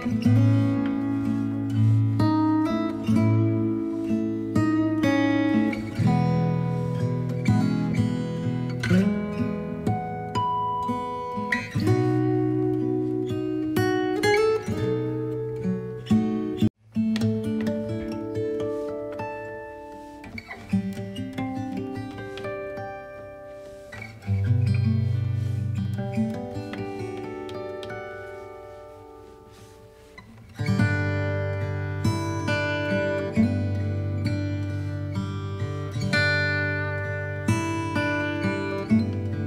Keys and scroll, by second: 5.8 space, 6.7 b, 9.7 ctrl+z, 11.6 alt+space, 37.1 b, 38.4 alt+space.